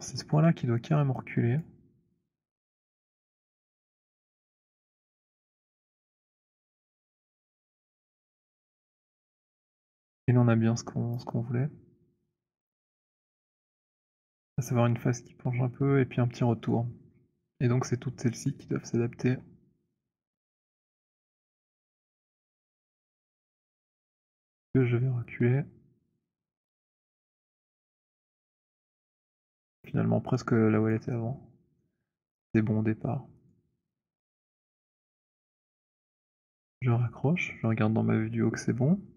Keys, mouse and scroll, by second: 1.0-1.5 scroll, 1.5 click, 6.1 click, 7.3 click, 10.8 click, 14.1 click, 18.4 click, 21.4 click, 21.4 right click, 23.2 click, 28.5 click, 31.2 alt+click, 31.9 alt+middle click, 33.4 click, 35.4 right click, 36.4 click.